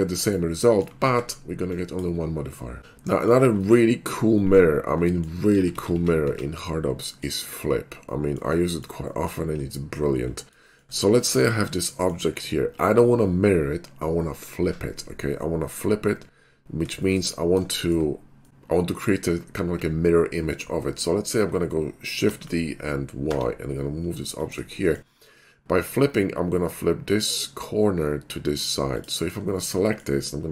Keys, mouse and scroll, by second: 0.3 shift+right click, 0.6 middle click, 0.6 typing, 1.1 ctrl+KP_Add, 1.8 drag, 4.0 middle click, 4.4 middle drag, 5.2 middle click, 5.6 ctrl+z, 5.8 ctrl+z, 5.9 ctrl+z, 6.3 ctrl+z, 7.1 middle click, 8.1 middle click, 8.8 shift+middle click, 9.2 middle click, 10.7 shift+middle click, 11.3 click, 17.0 middle drag, 17.0 shift+4, 17.4 middle click, 17.6 shift+5, 17.7 middle drag, 22.3 shift+d, 23.3 y, 24.4 click, 24.8 shift+middle click, 28.9 click, 29.6 shift+middle drag, 29.8 middle click.